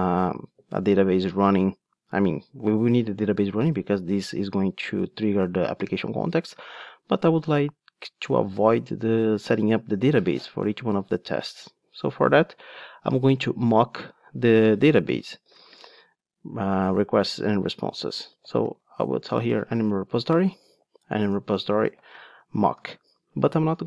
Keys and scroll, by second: 0.4 ctrl+Tab, 19.9 Return.